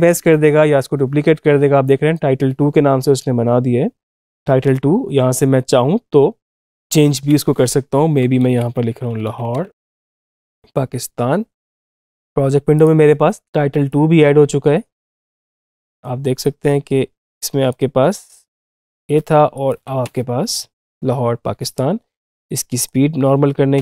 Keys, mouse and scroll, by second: 1.7 click, 6.3 click, 6.9 ctrl+a, 7.8-11.6 typing, 19.9 space, 21.6 space, 22.3-23.6 drag, 23.6 space.